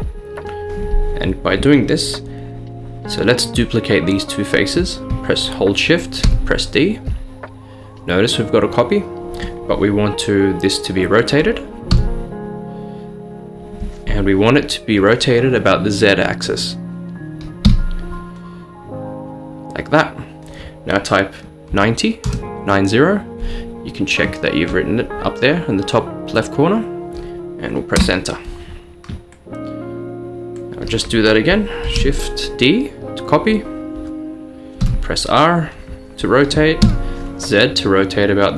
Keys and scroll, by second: 6.3 d, 11.9 r, 17.9 z, 21.8-22.4 typing, 27.8 typing, 28.0 Return, 31.9 d, 34.9 r, 36.9 z.